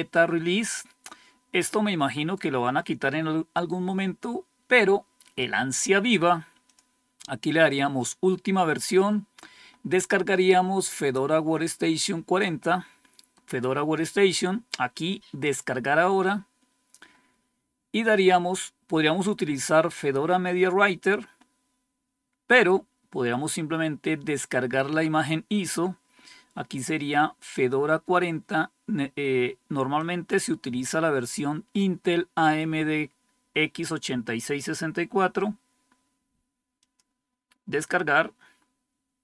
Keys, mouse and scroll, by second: 6.6 click, 15.3 click, 21.2 scroll down 2, 22.1 scroll down 2, 29.9-31.3 drag, 36.7 click.